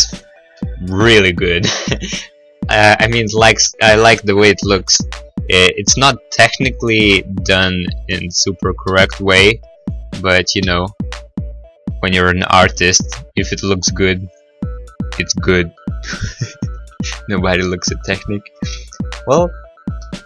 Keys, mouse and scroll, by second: 6.8 right click, 7.0 right click, 7.1 middle click, 7.3 middle click, 7.4 middle click, 7.8 middle click, 8.4 middle click, 9.1 click, 9.1 b, 10.0 click, 10.8 b, 12.3 click, 12.6 g, 13.7 x, 14.5 click, 14.5 s, 16.7 click, 16.7 g, 17.2 x, 17.9 click, 18.4 middle click, 18.7-19.3 scroll, 19.3 middle click, 19.6 middle click, 19.8 scroll, 19.9 middle click.